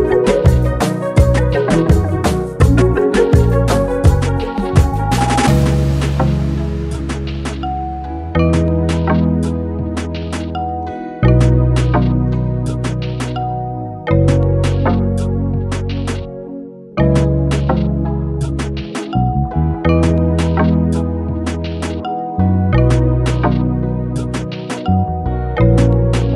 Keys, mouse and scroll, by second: 21.1-22.0 scroll down 2, 24.5-25.8 click.